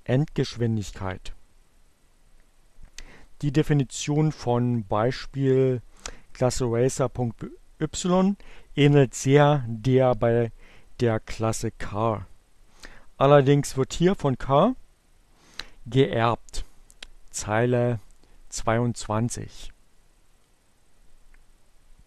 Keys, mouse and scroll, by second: 19.3-20.6 drag.